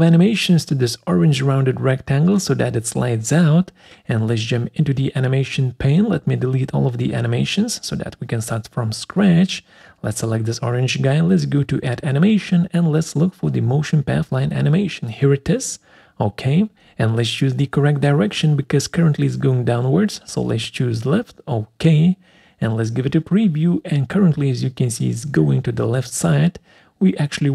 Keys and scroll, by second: 7.0 Delete.